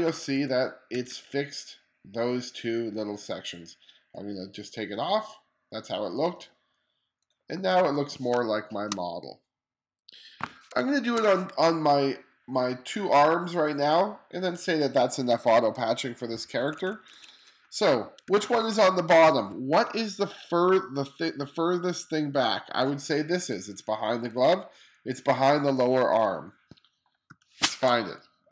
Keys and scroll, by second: 0.5 1, 7.3 1, 7.9 space, 10.3 space, 16.2 2, 23.0 2, 23.5 2, 26.9 o, 27.4 o, 27.6 space.